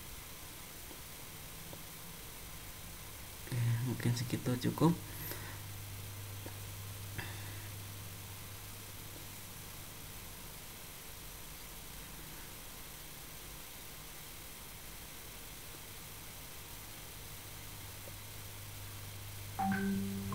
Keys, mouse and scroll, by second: 2.9 middle click, 9.0 click, 9.5 middle click, 11.7 middle click, 13.3 middle click, 14.4 scroll down 1, 15.2 click, 16.2 shift+click, 18.3 click, 19.5 shift+click.